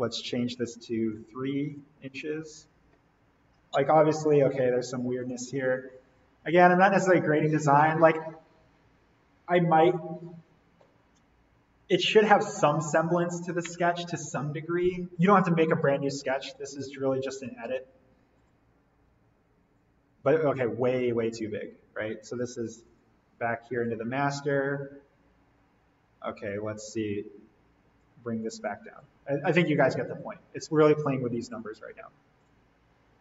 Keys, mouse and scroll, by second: 1.0 click, 1.1 3, 1.7 click, 3.5-4.1 scroll up 1, 5.2 click, 17.7 alt+l, 18.4 click, 21.1 Escape, 22.8 click, 26.5-30.0 drag, 30.9 2, 32.4 click.